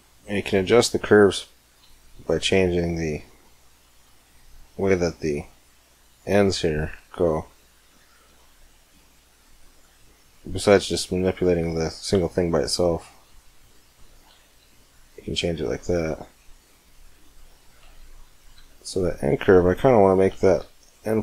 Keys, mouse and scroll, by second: 1.3-3.0 right drag, 1.6 g, 6.5-8.4 right drag, 6.7 g, 10.3-11.9 right drag, 10.7 g, 11.9 middle click, 12.4 middle click, 13.0 middle click, 13.6 click, 13.8 drag, 14.0 drag, 14.6 middle click, 15.0-18.4 middle drag, 18.4 Tab, 18.7-20.4 middle drag, 18.7 right click, 20.5 middle click.